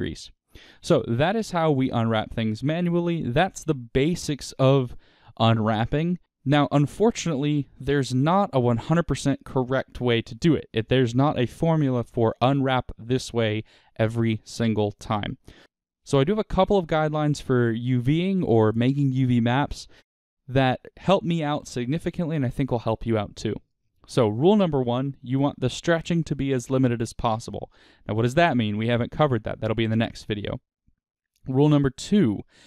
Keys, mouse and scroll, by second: 1.0-1.4 scroll down 2, 1.4 middle click, 1.9 middle click, 2.2-6.1 scroll up 2, 6.1 scroll up 1.